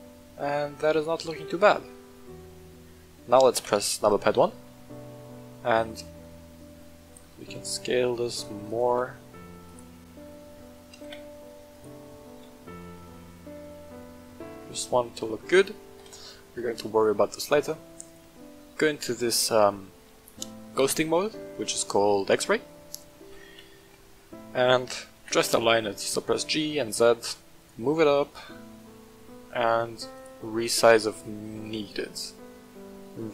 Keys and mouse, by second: 1.8 middle click, 3.5 KP_1, 4.6-5.3 shift+middle drag, 6.2-6.7 middle drag, 7.2 s, 8.6 click, 8.8 s, 9.0 x, 9.6 click, 10.0 middle click, 10.9 s, 11.1 x, 11.7 click, 12.0 middle drag, 12.5 shift+drag, 12.9 drag, 13.7-15.3 drag, 15.9 KP_1, 18.0 click, 23.7 shift+middle click, 24.3 shift+middle drag, 25.1 g, 25.3 z, 27.6 click, 28.3-28.7 middle drag, 30.1 click, 30.9 middle drag, 31.3 middle drag, 31.8 shift+middle drag, 32.4-32.8 middle drag.